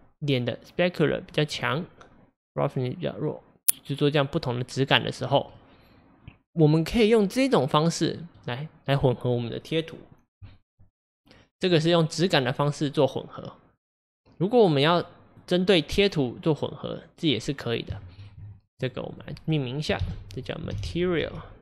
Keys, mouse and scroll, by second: 5.5-8.6 middle drag.